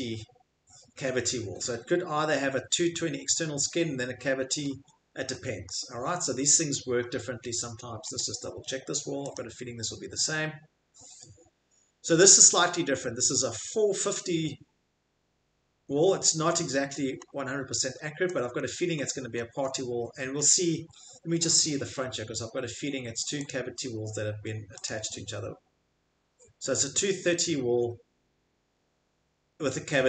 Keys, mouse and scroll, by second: 4.4 middle click, 4.4 middle click, 4.7 Escape, 5.6 middle click, 6.1 middle click, 6.2 middle click, 6.4 middle click, 8.2 click, 9.3 click, 13.0 scroll, 15.5-16.4 scroll, 16.5 Escape, 16.8-19.1 scroll, 19.3 middle click, 19.3 middle click, 19.6 middle click, 20.3 middle click, 23.5 click, 23.5 scroll, 24.0 scroll, 24.8 click.